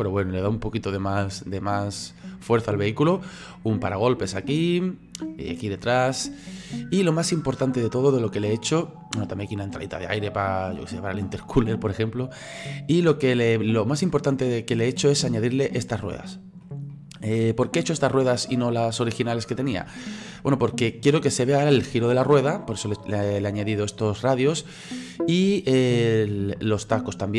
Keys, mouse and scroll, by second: 16.0-17.7 middle drag, 17.7-18.4 scroll up 3, 18.4-27.3 middle drag.